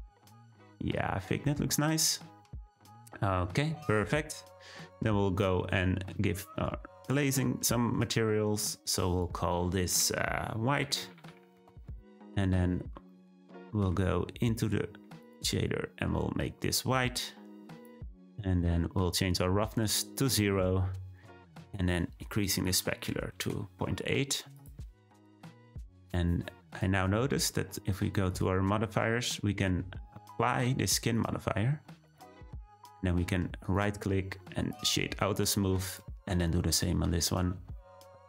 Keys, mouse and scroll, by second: 0.2-0.5 scroll down 1, 1.6-5.6 shift+middle drag, 5.6 scroll up 2, 6.6 click, 8.6-12.7 drag, 12.8 scroll down 3, 13.0-16.9 middle drag, 16.9 click, 19.7-24.7 drag, 25.8 click, 26.8 click, 32.1-33.6 drag, 33.6-35.8 right drag, 35.8 drag.